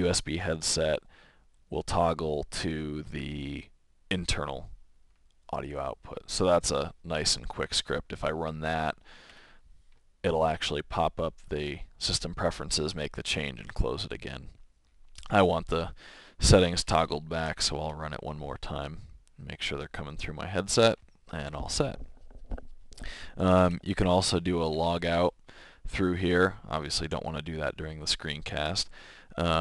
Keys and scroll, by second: 17.8 Return, 24.1-25.3 typing.